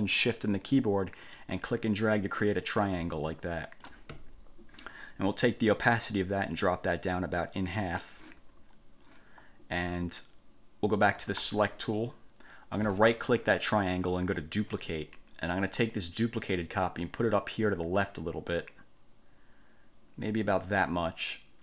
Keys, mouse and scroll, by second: 1.5-4.3 ctrl+shift+drag, 6.2-8.3 drag, 11.4 click, 13.0 click, 14.5 click, 16.1-21.6 drag.